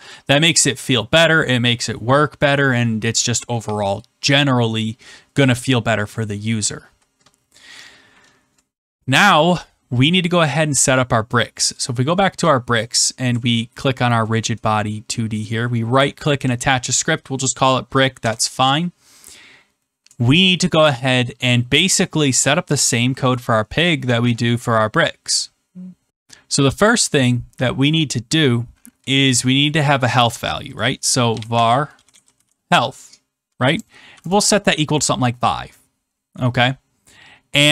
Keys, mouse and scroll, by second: 0.0 click, 9.6-10.7 scroll, 10.7 scroll, 11.7 click, 12.8 click, 13.9 scroll, 14.5 middle click, 15.4 right click, 16.5 click, 18.1 Return, 30.3 click, 30.7 click, 31.1-32.9 typing, 34.3-35.1 typing.